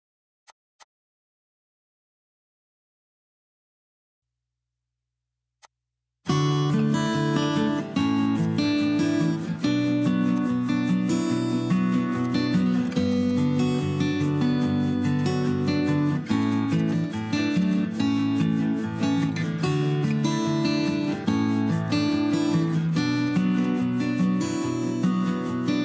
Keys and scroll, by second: 0.0 p, 3.0 Escape, 9.9-13.0 typing, 14.4 p, 16.4 Escape, 16.7 p, 17.5 Escape, 17.9 e, 20.4 m, 22.0-22.5 typing.